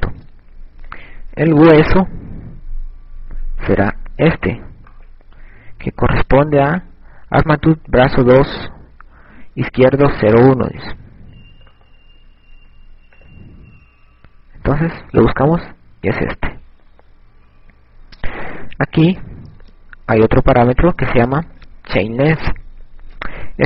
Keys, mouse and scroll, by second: 2.0 click, 6.4 right click, 12.4 right click, 14.3 click, 21.6 click.